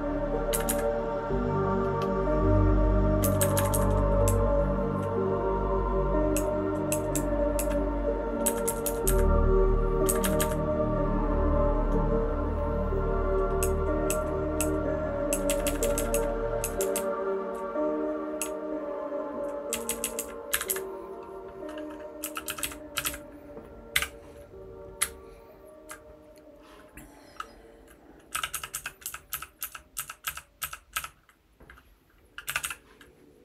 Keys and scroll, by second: 0.5 Up, 0.6 Up, 3.2 Up, 3.4 Up, 3.5 Up, 3.7 Up, 4.2 Down, 4.7 Down, 4.8 Down, 4.9 Down, 6.3 Down, 6.9 Down, 7.1 Down, 7.5 Down, 8.4 Up, 8.8 Up, 9.0 Up, 10.0 Up, 10.2 Up, 10.3 Up, 13.6 Down, 14.1 Down, 14.6 Down, 15.3 Down, 15.4 Down, 15.6 Down, 15.8 Down, 15.9 Down, 16.1 Down, 16.6 Down, 16.8 Down, 17.4 Down, 17.5 Down, 18.4-19.3 Down, 19.7 Down, 19.9 Down, 20.0 Down, 20.2 Down, 20.4 Up, 20.6 Up, 22.3-23.9 typing, 25.0 Right, 25.5-25.8 Right, 28.3-30.9 typing, 32.4-33.1 typing.